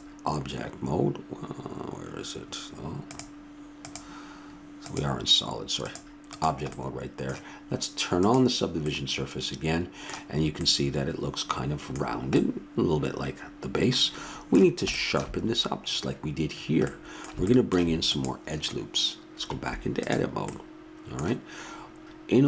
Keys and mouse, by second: 3.1-5.7 drag, 5.8-7.5 drag, 6.7-7.9 middle drag, 8.2-10.0 drag, 8.2-9.7 middle drag, 9.8 middle click, 9.9-12.8 middle drag, 18.1 click, 19.5 Tab.